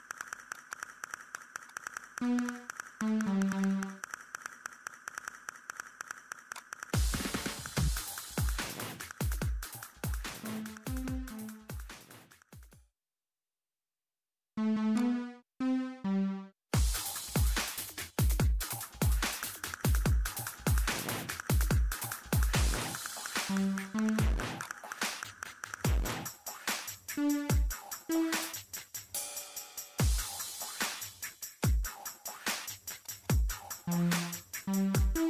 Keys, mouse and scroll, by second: 0.8 scroll up 1, 0.9 middle click, 1.3 click, 2.3-4.5 typing, 5.3 click, 18.6 click, 30.0 ctrl+middle click, 31.6 click, 32.2 middle click, 33.1 click, 33.4 middle click.